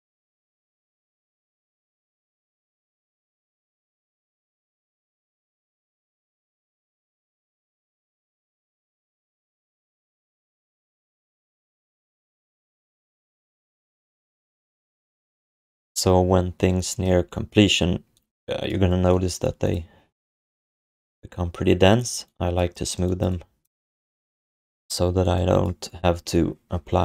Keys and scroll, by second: 2.2 q, 3.2 alt+shift+d, 3.5 ctrl+s, 6.3 alt+d, 6.6 ctrl+s, 9.3 1.